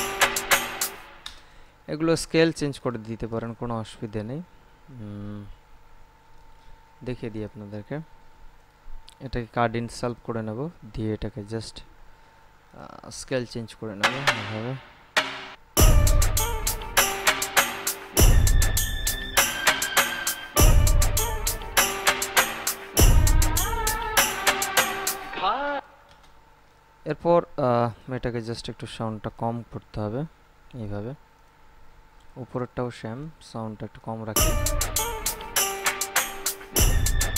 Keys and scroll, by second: 1.1 space, 16.0 space, 26.1 space, 34.5 space.